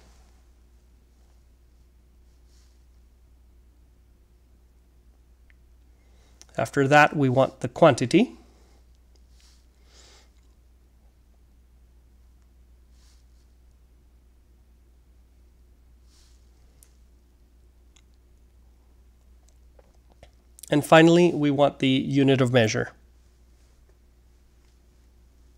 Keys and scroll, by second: 1.9-5.7 typing, 7.2-9.0 typing, 10.8 typing, 14.2 BackSpace, 17.7-22.7 typing.